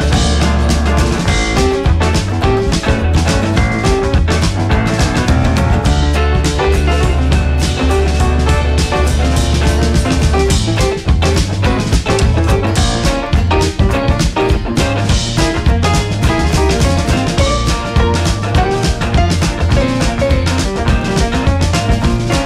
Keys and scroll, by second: 5.0 Down, 6.5 Left, 8.6 Right, 14.4 Right, 14.6 Left, 15.9 Right.